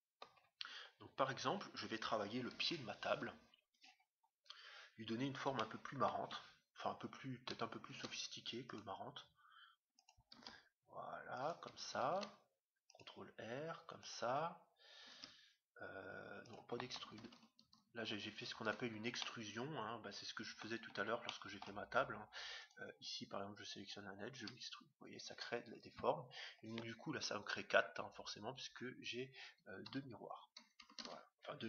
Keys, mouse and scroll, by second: 1.0-1.3 scroll up 1, 1.3-2.3 scroll down 1, 2.3 scroll down 1, 2.5 KP_3, 4.1-5.5 scroll up 1, 5.5-7.4 middle drag, 7.4-8.3 scroll up 1, 7.9 ctrl+r, 10.3 s, 12.1 ctrl+r, 15.0 e, 17.1 ctrl+z, 19.2-22.9 middle drag, 22.5-24.3 right drag, 24.3 e, 30.9 ctrl+z.